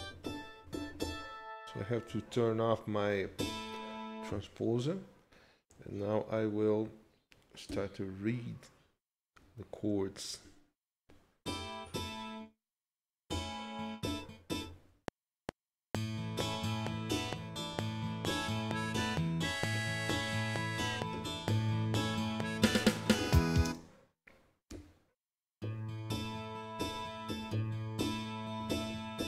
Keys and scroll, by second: 7.7 d, 23.6 space, 24.7 z.